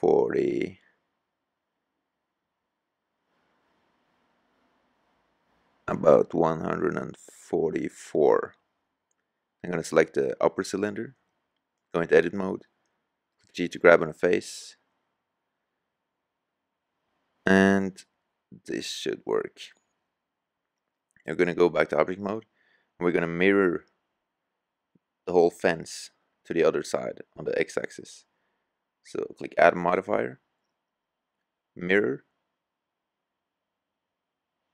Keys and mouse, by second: 3.4-5.5 drag, 6.7-7.7 drag, 7.7-8.4 middle drag, 9.7 right click, 14.3 g, 17.8 middle click, 18.0 middle click, 18.9 middle click, 21.2 middle drag, 21.4 click, 21.6-22.8 middle drag, 27.4-29.0 middle drag, 29.0 click, 29.0-30.6 right drag, 32.8-34.7 drag.